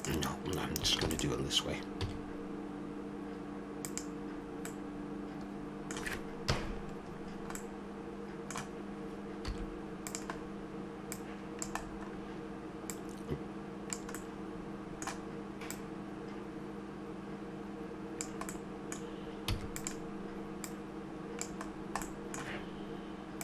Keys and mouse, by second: 1.1 shift+d, 2.0 s, 6.4 KP_Decimal, 7.7 middle click, 9.5 s, 11.1-14.7 drag, 14.7 middle click, 15.6-17.6 drag, 18.6 middle click, 19.5 e, 20.6-22.9 drag.